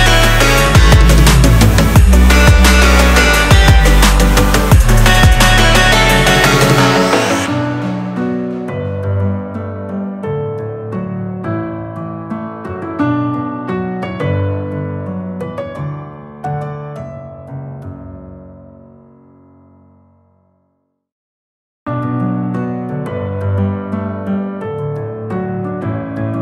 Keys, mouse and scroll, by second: 7.4-9.4 drag, 9.4 scroll down 1, 10.0-10.4 scroll down 3, 10.4 shift+middle click, 10.9-11.4 scroll up 3, 11.4-12.0 middle drag, 12.0 g, 17.0 click, 18.5 click, 19.7 click, 20.5 s, 22.0 g.